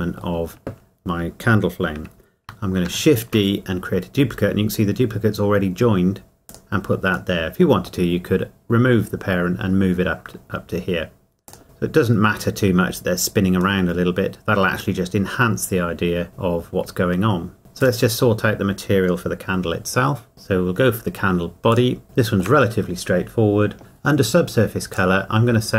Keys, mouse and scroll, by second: 2.9 shift+d, 6.5 click, 7.3 middle click, 9.0 scroll down 1, 11.5 click, 13.8 middle click, 15.3 scroll down 1, 17.6 click, 20.3 click, 22.0-22.4 scroll up 1, 23.1 shift+middle click, 24.9 click.